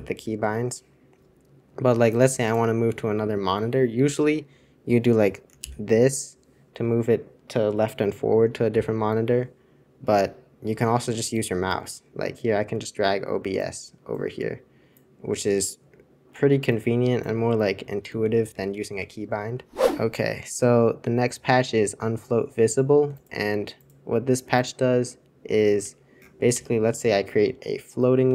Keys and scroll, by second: 0.1 super+k, 5.7 super+<, 8.7 super+<, 18.3 super+c, 18.5 super+c, 18.8 super+c, 19.0 super+2, 25.9 super+1, 26.5 super+Return.